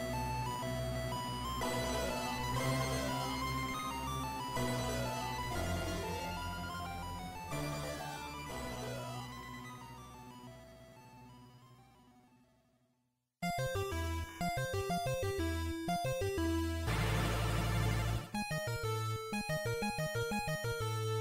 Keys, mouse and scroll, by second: 2.1 x, 6.1 shift+middle click, 9.1 b, 12.3 x, 16.1 click, 17.5-18.3 scroll up 2, 18.3 shift+middle click, 20.5 right click.